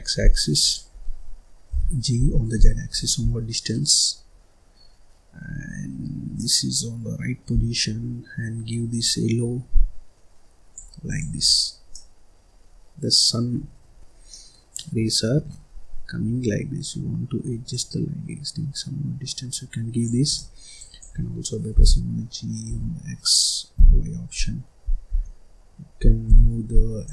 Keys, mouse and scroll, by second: 0.9-1.6 scroll down 1, 1.6 g, 3.2 scroll down 1, 3.2-5.6 middle drag, 5.6-6.3 scroll up 3, 6.3-7.5 middle drag, 7.5-7.8 scroll down 1, 7.8-8.9 scroll up 3, 8.9 click, 11.0 click, 11.4-11.8 scroll down 5, 11.8-13.4 middle drag, 13.4-14.0 scroll up 5, 14.0 scroll down 1, 14.2-16.3 middle drag, 16.3-17.6 scroll up 2, 17.6 click, 20.3 middle click, 20.7 click, 21.7 g.